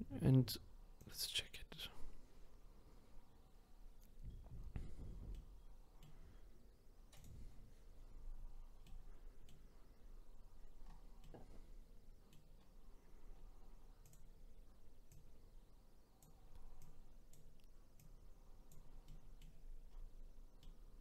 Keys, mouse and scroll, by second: 1.0 click, 4.0-5.3 scroll down 7, 5.3-7.1 middle drag, 7.1 click, 8.0-8.8 scroll up 5, 8.8-10.8 middle drag, 10.8-11.2 scroll down 2, 11.2-12.6 middle drag, 12.6-13.3 scroll down 6, 13.3-14.0 scroll down 2, 14.0 click, 15.1 click, 16.8 click, 18.0 click, 19.0-19.5 middle drag, 19.5-20.6 scroll up 11, 20.6-21.0 middle drag.